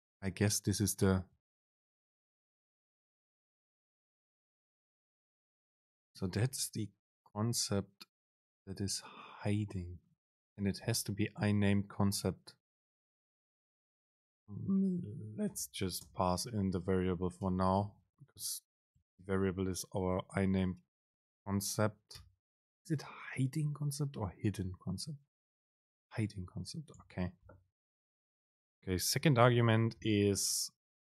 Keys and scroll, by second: 16.6 super+space, 27.3 alt+super+[, 30.1 super+p.